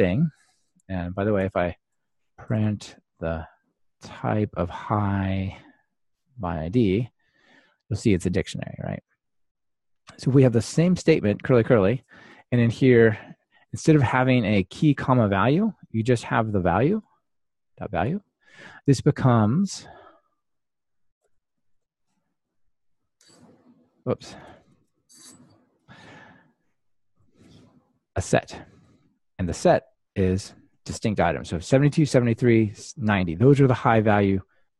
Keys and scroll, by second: 0.7 super+c, 6.2 Return, 7.0 ctrl+r, 12.6 super+v, 13.8 Tab, 14.4 ctrl+alt+shift+Right, 17.0 Delete, 18.0 Delete, 19.3 Return, 23.2 Return, 24.3 Return, 24.4 ctrl+alt+shift+Left, 24.7 super+x, 25.7 super+v, 27.1 ctrl+r.